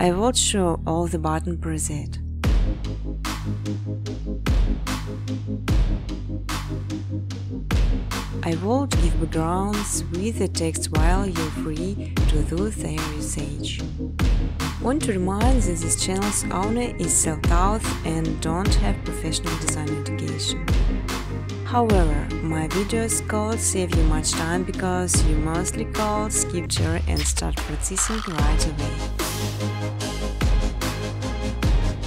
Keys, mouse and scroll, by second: 1.1 click, 2.4 click, 3.0 click, 3.5-4.5 typing, 5.8-6.5 typing, 8.2 click, 8.7 click, 9.8 click, 13.9-16.1 typing, 16.0 Return, 17.7 click, 18.5 click, 18.5-22.3 typing, 21.8 Return, 23.6-24.1 typing, 25.0 click, 26.3-29.8 typing, 30.5-31.7 scroll, 31.6-32.0 typing, 31.8 click.